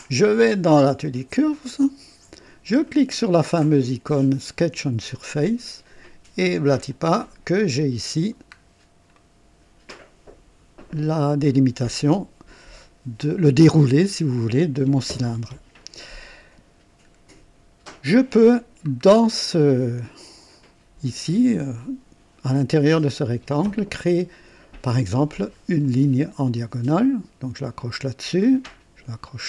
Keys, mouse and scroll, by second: 0.6 click, 1.7 click, 5.0 click, 6.8 click, 7.6 click, 8.7 scroll down 2, 9.1 right click, 19.0 scroll up 2, 19.5 right click, 25.8 click, 27.7 click.